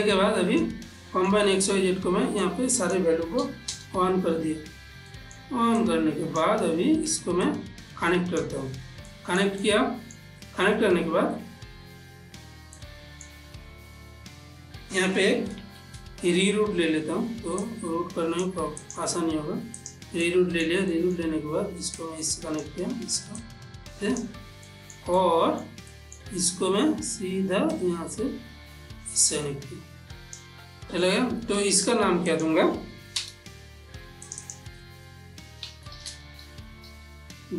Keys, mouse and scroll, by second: 0.3 click, 1.3 middle click, 2.8 click, 5.5 middle click, 6.1-7.5 drag, 7.8-9.4 drag, 9.4-13.1 ctrl+middle drag, 13.1-16.1 ctrl+middle drag, 16.1 shift+a, 17.9 click, 20.6 ctrl+middle click, 22.3-25.0 drag, 25.0 ctrl+middle click, 25.5 middle click, 28.0-32.7 drag, 34.6 click, 36.3-37.5 typing.